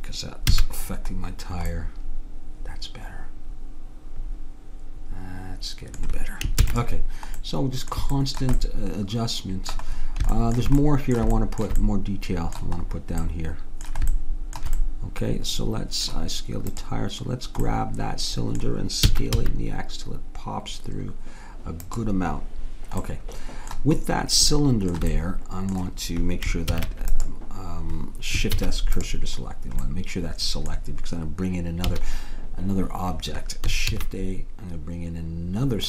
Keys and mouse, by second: 0.5 a, 1.8 middle click, 2.4 middle click, 6.7 ctrl+s, 10.2-13.6 middle drag, 16.8-18.5 drag, 17.7-18.8 right drag, 19.1 s, 23.0-24.1 middle drag, 26.8 ctrl+s, 28.6 shift+s, 31.9 a, 34.0 shift+a.